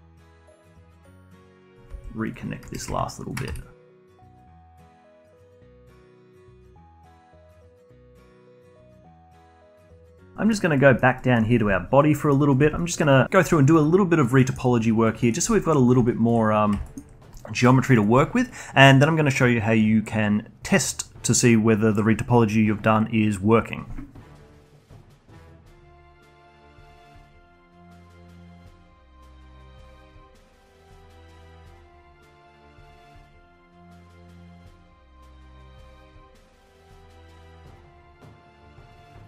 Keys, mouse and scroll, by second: 0.0-5.8 typing, 0.7 click, 2.8 click, 3.2 shift+click, 3.9 click, 4.8 click, 5.7 click, 6.8 click, 7.1 g, 8.2 click, 8.3 g, 10.1 scroll down 3, 10.2 middle click, 10.7 alt+middle click, 11.5 scroll down 2, 11.7-12.1 alt+drag, 12.1 alt+middle drag, 12.3-12.7 alt+drag, 12.7 alt+middle click, 12.9 alt+drag, 13.2 alt+middle drag, 13.4-15.0 alt+drag, 15.0 alt+middle drag, 15.2-15.8 alt+drag, 15.8 alt+middle click, 16.7 alt+click, 17.5 alt+middle click, 18.0 alt+click, 24.3 middle click, 24.4 alt+click, 24.5 scroll up 2, 24.6 alt+click, 24.8-25.9 typing, 25.0 alt+click, 25.2 alt+click, 25.2 alt+middle click, 25.3 alt+click, 25.6 alt+click, 25.8 alt+click, 26.1 ctrl+r, 26.2 alt+click, 26.2 alt+middle click, 26.5-27.1 scroll up 4, 26.6 alt+click, 27.1-30.8 typing, 27.1 alt+click, 27.3 alt+click, 27.4 alt+middle click, 27.6 alt+click, 27.8 alt+click, 28.0 alt+middle click, 28.0 alt+click, 28.2 alt+click, 28.4 alt+click, 28.7 alt+click, 29.1 ctrl+r, 29.5 alt+click, 29.6 ctrl+z, 29.7 alt+click, 29.9 click, 30.1 alt+click, 30.5 alt+click, 30.9 alt+drag, 31.1 alt+middle click, 31.1 scroll up 2, 31.2 alt+middle click, 31.3 alt+click, 31.6 click, 31.7 scroll down 4, 31.8 alt+click, 31.8 scroll up 1, 31.9 alt+click, 32.0 ctrl+r, 32.2 alt+click, 32.4 alt+click, 32.6-38.6 typing, 32.7 alt+click, 32.9 alt+middle click, 33.0 scroll up 2, 33.1 alt+click, 33.4 alt+click, 33.7 alt+click, 33.9 alt+click, 33.9 scroll up 1, 34.0 alt+middle click, 34.1 alt+click, 34.2 alt+click, 34.3 alt+middle click, 34.5 alt+click, 34.7 alt+click, 34.9 shift+click, 35.0 alt+click, 35.3 alt+click, 35.4 alt+click, 35.5 alt+middle click, 35.5 alt+click, 35.8 alt+click, 36.1 alt+click, 36.1 alt+middle click, 36.6 Tab, 36.9 click, 36.9 alt+middle click, 37.0 Tab, 37.1 alt+middle click, 37.2 Tab, 37.3 alt+middle click, 37.4 alt+click, 37.5 alt+middle click, 37.7 click, 37.9 alt+middle click, 38.0 click, 38.2 alt+middle click, 38.3 click, 38.4 alt+click, 38.6 alt+middle click, 38.7 shift+click, 38.8 alt+click, 39.0 shift+right click, 39.1 alt+middle click, 39.1 alt+click, 39.2 alt+middle click.